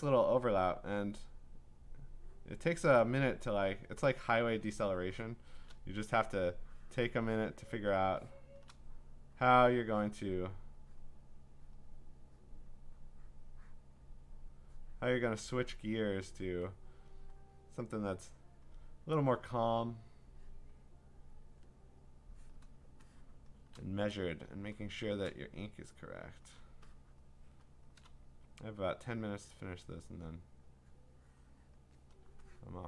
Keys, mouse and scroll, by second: 0.2 ctrl+z, 2.0 click, 2.6 click, 4.8 click, 5.4-6.6 scroll, 5.5 click, 7.6-7.9 click, 8.5 click, 10.1 click, 11.0 click, 11.8 click, 12.7 click, 13.9 click, 14.9 click, 15.8 click, 17.6 click, 18.0 click, 18.7 click, 19.5 click, 20.7 click, 21.6 click, 22.5 click, 23.3 click, 23.4 click, 23.5 click, 23.6 click, 23.8 click, 24.3 click, 25.1 click, 25.1 click, 25.3 click, 26.4 click, 27.2 click, 27.3 click, 27.4 click, 27.8 click, 29.7 click, 31.7 click, 32.8 click.